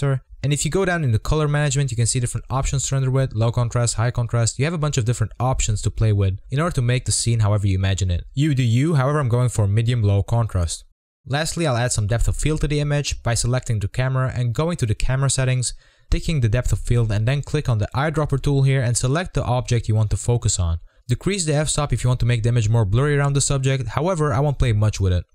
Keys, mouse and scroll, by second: 11.8 g, 11.9 g, 12.3 scroll down 3, 12.6 click, 12.8 click, 13.3 click, 17.5 click, 18.4 click, 19.0 click, 19.9 g, 20.0 g, 20.5 s, 21.6 scroll up 2, 23.3-23.8 scroll down 1, 24.3 click, 24.9 scroll down 1.